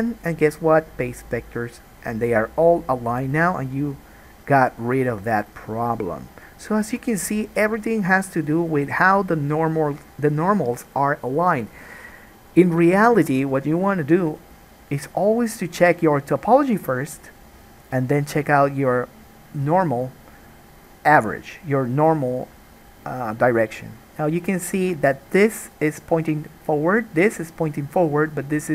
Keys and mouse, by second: 25.8 click, 25.9-27.3 middle drag, 27.3 click, 27.4 middle click, 28.4 click.